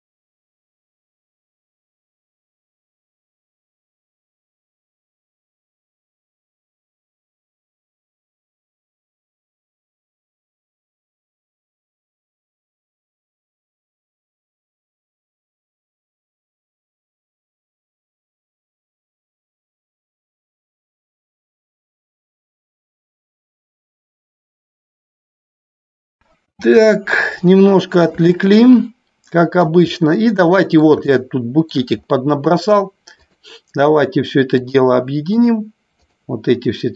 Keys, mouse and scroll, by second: 3.0 Delete, 4.6 click, 6.1 Delete, 7.6-10.1 middle drag, 12.7-13.2 middle drag, 15.3-16.6 middle drag, 18.0-19.3 middle drag, 27.8-28.3 middle drag, 28.6-29.9 shift+middle drag, 30.6 middle click, 31.3-31.9 shift+middle drag, 34.9 shift+click, 35.6 shift+click, 36.3 shift+click.